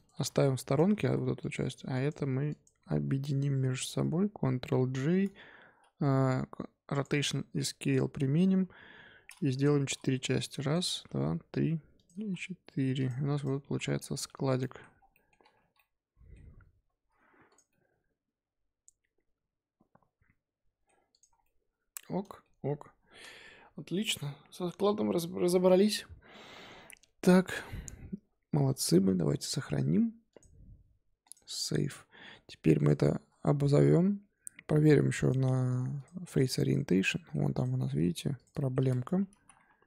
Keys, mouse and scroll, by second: 0.1 g, 0.8 scroll up 2, 1.0 z, 1.4 drag, 1.9 ctrl+click, 2.5 ctrl+drag, 3.1 scroll up 1, 3.2 z, 3.7 shift+click, 4.7 ctrl+j, 6.2 ctrl+a, 7.2 ctrl+a, 8.5 KP_7, 9.7 shift+d, 10.9 shift+d, 12.1 shift+d, 13.3 click, 13.6 z, 13.8 scroll down 2, 13.9-14.3 middle drag, 14.3 z, 14.6-14.9 middle drag, 14.9 scroll down 1, 15.1 middle click, 15.5 KP_5, 15.7-16.5 middle drag, 16.5-17.4 scroll up 3, 17.4 click, 17.7-20.7 middle drag, 21.1 click, 21.3 scroll down 4, 21.4-24.5 middle drag, 30.3-31.9 drag, 31.9-32.7 scroll up 5, 32.7 click, 33.9-35.2 scroll down 4, 35.2-36.9 drag, 36.9-37.5 middle drag, 37.5 click, 37.7-38.3 middle drag, 38.3 click, 38.5 shift+middle drag, 38.8 scroll up 4, 39.3 z, 39.5 1.